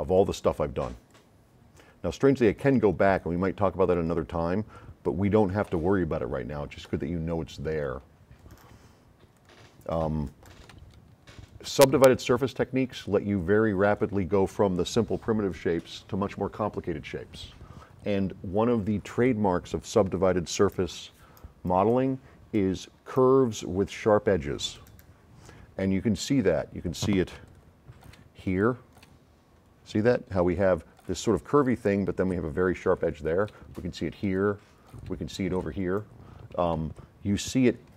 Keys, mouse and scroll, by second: 0.1 click, 1.1 click, 2.6-3.2 drag, 3.9 click, 5.3 click, 5.6 click, 7.8 click, 9.3 click, 10.8 s, 10.9-14.1 right drag, 26.4 middle click, 26.4-26.7 scroll up 2, 27.4 s, 27.5 click, 28.5 s, 28.6 click, 29.1 click, 30.5 s, 30.6 click, 31.6 right click, 32.9 s, 33.0 click, 34.3 s, 36.0 middle click, 36.7-37.7 right drag, 36.7 s.